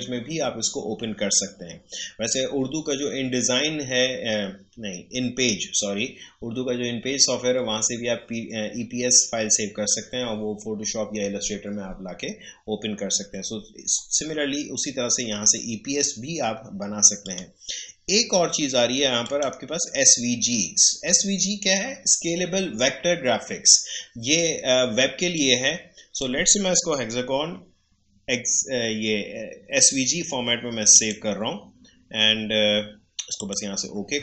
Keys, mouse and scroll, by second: 17.2 click, 25.3-28.6 drag, 30.9 click, 33.3 click.